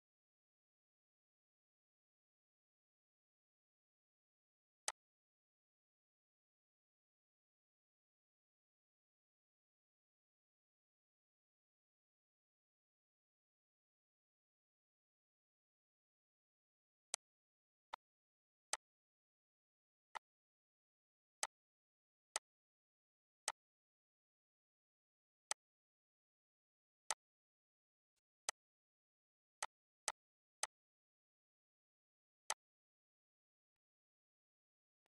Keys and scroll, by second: 27.7 ctrl+z.